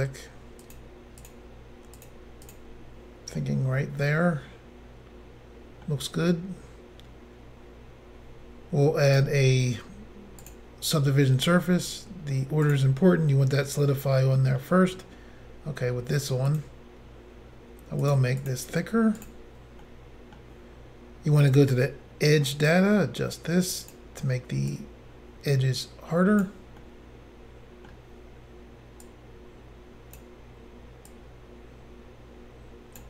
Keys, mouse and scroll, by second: 0.6 click, 0.7 click, 1.2 click, 2.0 click, 2.5 click, 3.4 middle click, 9.1 click, 9.2 click, 10.4 click, 10.5 click, 12.6 click, 12.7 click, 13.6 middle click, 16.5 click, 16.6 click, 18.0 click, 18.1 click, 18.4 click, 18.5 click, 19.2 click, 19.3 click, 19.8 middle click, 21.5 click, 22.7 click, 24.7 click, 26.8 middle click, 29.1 click, 31.1 click.